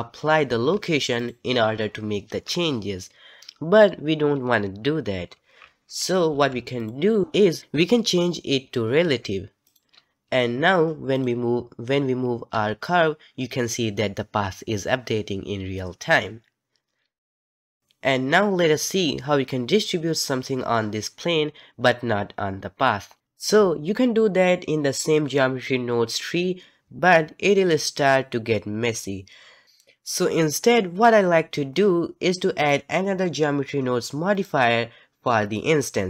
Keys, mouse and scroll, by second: 0.5 ctrl+a, 5.6 ctrl+z, 6.3 ctrl+z, 6.8 click, 9.7 click, 11.1 click, 12.5 g, 34.4-35.4 drag, 35.4-36.0 right drag.